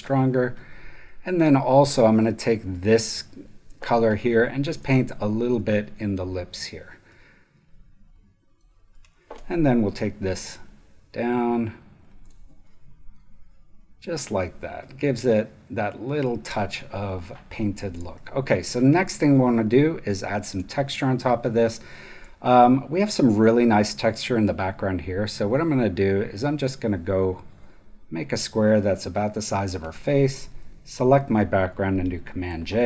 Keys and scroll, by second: 3.8 alt+space, 12.2 space, 15.1 super+space, 17.1 super+space, 18.1 super+v, 20.4 space, 23.8 space, 32.2 super+j.